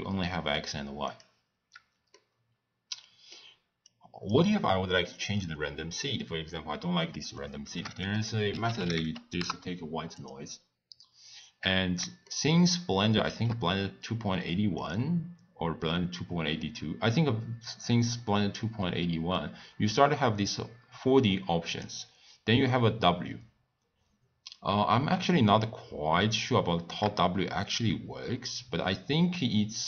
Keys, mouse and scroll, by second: 1.2 click, 2.2-3.8 middle drag, 3.8 click, 10.3 shift+a, 12.4-22.0 shift+middle drag, 22.0 click, 25.7-28.3 drag.